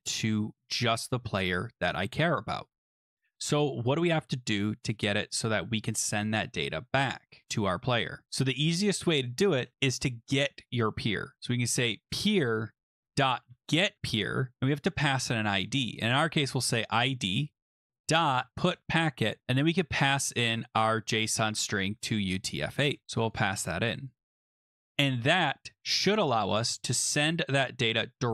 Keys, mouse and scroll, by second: 2.6-3.3 scroll down 10, 3.4-4.1 scroll, 9.5 Return, 11.3-14.1 typing, 15.8-16.6 typing, 17.6-18.8 typing, 20.1 click, 22.4 click, 22.9 ctrl+c, 23.3 click, 23.5 ctrl+v, 24.5 click, 24.8 BackSpace, 24.9 BackSpace, 25.1 BackSpace, 26.3 ctrl+s.